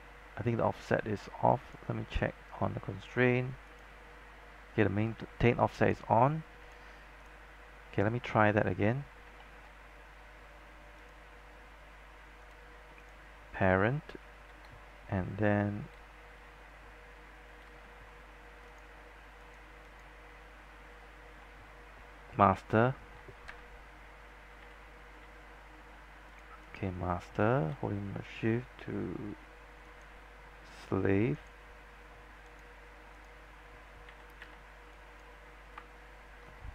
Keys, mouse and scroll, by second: 1.7 click, 7.8 scroll up 1, 8.1-8.4 scroll down 1, 8.8-9.2 scroll up 1, 9.5 alt+middle click, 11.1-14.1 drag, 18.8 click, 21.0 scroll up 1, 21.4 scroll down 1, 22.6 shift+middle click, 24.7 z, 25.3 z, 26.4 click, 30.0 shift+click, 32.6 shift+click, 34.2 z, 35.0 click.